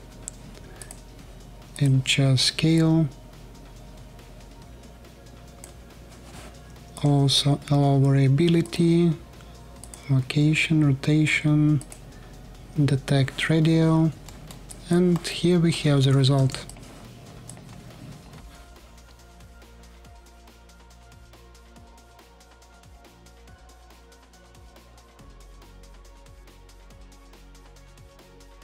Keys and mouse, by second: 7.2-8.8 drag, 8.8-10.0 middle drag, 11.9-14.4 middle drag, 16.1 Tab, 16.4 middle click, 17.3 middle click, 17.6 alt+click, 18.7 ctrl+shift+KP_2, 18.8-20.0 ctrl+shift+drag, 20.3-28.4 alt+drag, 28.5 click.